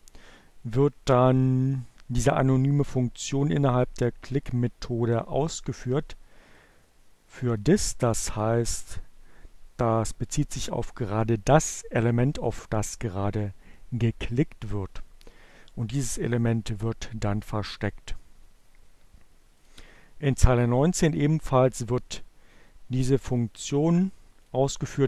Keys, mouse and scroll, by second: 6.2 click, 7.1-8.1 drag, 14.6 click, 15.1-16.7 drag, 22.8-24.3 drag.